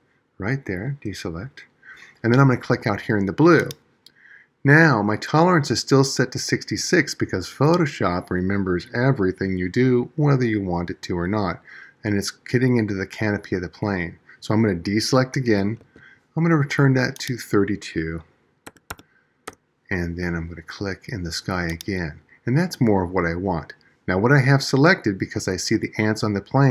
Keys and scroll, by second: 15.2 super+d.